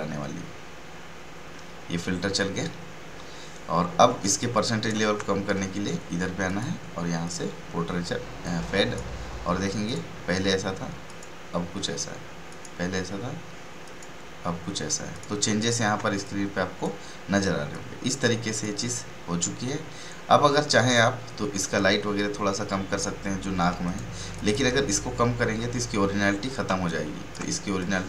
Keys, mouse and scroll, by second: 4.2 ctrl+space, 4.3 ctrl+click, 4.7 ctrl+space, 4.8 ctrl+space, 5.0 ctrl+space, 6.4-9.8 drag, 15.9-19.6 typing, 16.2 click, 17.7 click, 23.7 space, 23.8 right click, 24.3 click, 26.6 ctrl+space, 27.1 ctrl+space, 27.4 ctrl+space, 27.7 click.